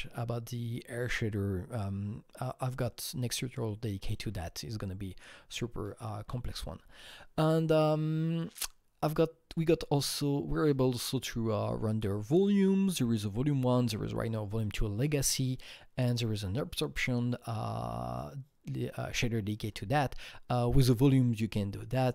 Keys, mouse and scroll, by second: 19.5 Right.